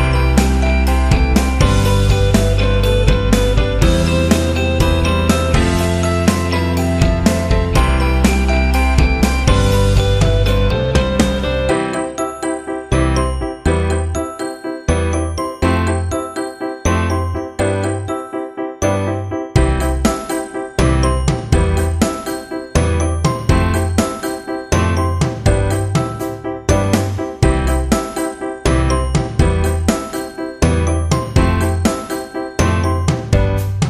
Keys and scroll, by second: 2.3 z, 6.0 v, 9.0 ctrl+t, 22.0 Return, 27.0 ctrl+e, 29.0 v, 32.0 ctrl+j.